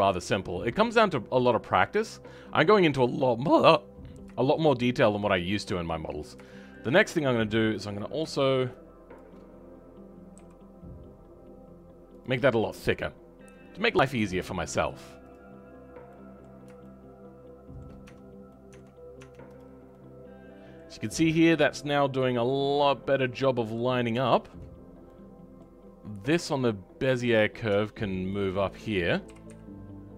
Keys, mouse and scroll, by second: 0.0-3.8 scroll down 7, 3.8 scroll up 2, 4.7-6.0 scroll up 6, 6.0-6.4 scroll down 3, 6.4 shift+middle click, 6.8-7.9 scroll up 3, 7.9 click, 10.2 g, 12.4-14.0 scroll down 12, 14.2-15.2 scroll down 4, 15.2 click, 15.7-16.1 scroll up 3, 16.1-18.0 middle drag, 18.0 Tab, 18.5 middle click, 19.1 Tab, 20.0-23.9 middle drag, 23.9 scroll up 2, 24.2 shift+middle click, 24.7-25.0 scroll up 1, 25.0-27.3 middle drag, 27.3 click.